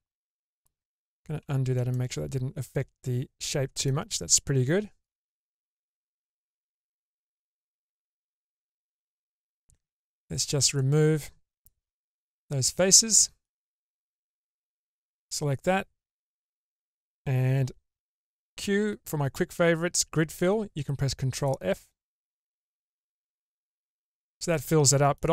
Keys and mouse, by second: 1.4 ctrl+z, 2.0-3.8 middle drag, 5.1 click, 5.8-8.8 middle drag, 9.6 3, 10.3 click, 12.3 Delete, 13.8 alt+2, 14.1 alt+click, 15.2-16.8 middle drag, 18.0 q, 22.3-25.1 middle drag.